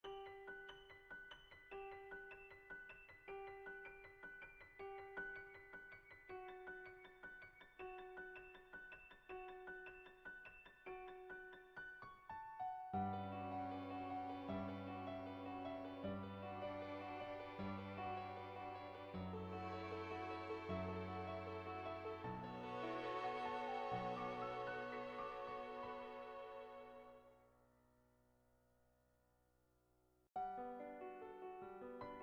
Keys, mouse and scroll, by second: 1.3-2.5 drag, 3.0 click, 4.5 ctrl+z, 4.8 click, 6.7 click, 9.7 click, 10.2 click, 10.5 click, 10.8 click, 11.4 click, 11.8 click, 12.9 click, 13.3 click, 13.4 click, 14.1 click, 14.6 ctrl+z, 14.7 click, 15.7 click, 16.0 click, 16.7 click, 17.1 click, 17.4 ctrl+z, 17.7 click, 18.1 click, 18.4 click, 18.7 click, 19.8 click, 20.0 click, 20.3 click, 20.6 click, 21.0 click, 21.3 ctrl+z, 21.6 click, 22.0 ctrl+z, 22.9 click, 23.3 click, 23.8 click, 24.2 click, 24.6 click, 26.3 Tab, 26.9 click, 27.6 shift+click, 27.9 middle click, 28.1 shift+middle click, 28.3 middle click, 28.5 shift+click, 29.3 Tab, 30.7 Tab, 31.9 click.